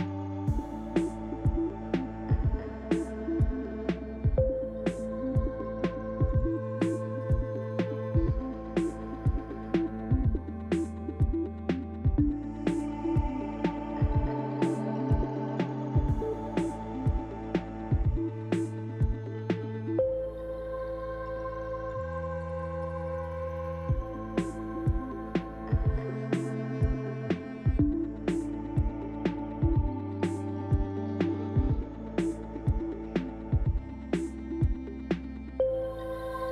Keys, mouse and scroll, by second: 0.9 ctrl+l, 2.4 click, 3.4 shift+middle click, 4.3-4.9 scroll up 2, 5.4 click, 6.3 KP_Decimal, 7.4 Tab, 7.7 middle click, 9.0 click, 10.3 shift+click, 10.7 click, 11.1 click, 11.5 click, 11.8 click, 12.8 click, 13.2 click, 13.7 Tab, 14.0 scroll down 1, 14.5 middle click, 15.8 shift+middle click, 17.1-17.6 scroll down 3, 17.6 shift+middle click, 18.6-18.9 scroll up 2, 19.1 shift+middle click, 19.7 middle click, 21.7 shift+middle click, 22.6 middle click, 27.3 click, 28.1 Tab, 28.8 click, 29.8 shift+click, 30.4 click, 30.7 click, 31.2 click, 31.9 click, 32.9 click, 33.6 click, 35.0 Tab, 35.5-36.0 scroll down 3.